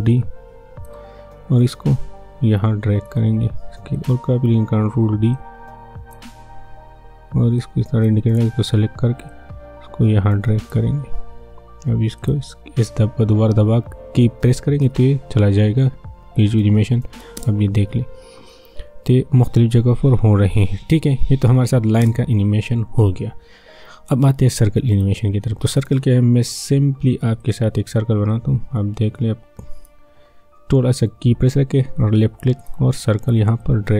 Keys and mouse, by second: 0.1-4.0 drag, 4.7 ctrl+d, 5.3-12.2 drag, 14.8 s, 16.3 click, 17.3 space, 22.0 space, 24.9 click, 27.4-29.1 right drag, 29.1-32.6 drag, 32.6-33.9 drag.